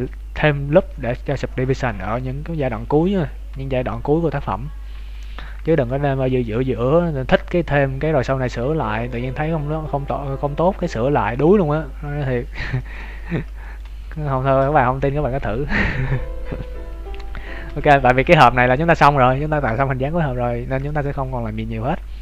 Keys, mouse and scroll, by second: 5.1 Tab, 5.6 shift+middle click, 6.0 Tab, 6.4 middle click, 11.2 Tab, 12.2-12.7 scroll down 8, 12.7 shift+middle click, 13.0 scroll up 2, 13.6 shift+middle click, 13.6-14.0 scroll up 4, 14.0 right click, 15.0 Tab, 15.3 Tab, 17.6 ctrl+s, 18.2 KP_3, 18.6 KP_1, 20.4 scroll up 5, 20.8 shift+middle click, 21.1 scroll down 2, 21.2-21.6 scroll down 2.